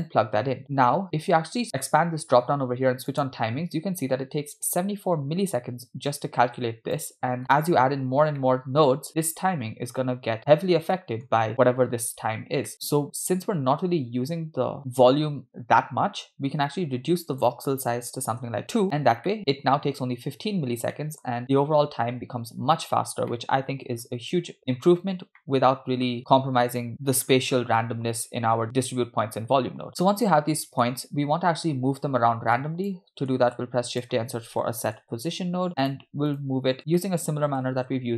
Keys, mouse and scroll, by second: 1.6-3.7 drag, 4.7-6.1 scroll up 1, 6.1-7.1 drag, 7.5-8.4 scroll down 2, 8.4 middle click, 8.9-9.5 scroll up 3, 11.0 middle click, 12.8 middle click, 12.8-13.2 scroll up 3, 17.3-18.4 drag, 19.2 middle click, 20.9 scroll down 2, 21.0 middle click, 23.3 middle click, 25.5-26.9 middle drag, 28.6 click, 30.0-31.0 middle drag, 32.6 click, 33.6 shift+a, 36.8 click, 37.0 middle click, 37.8 shift+a.